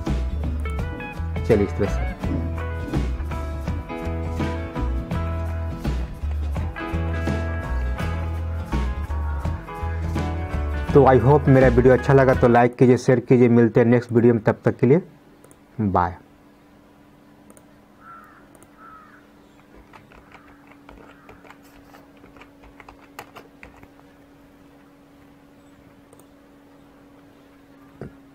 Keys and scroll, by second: 6.5 ctrl+z.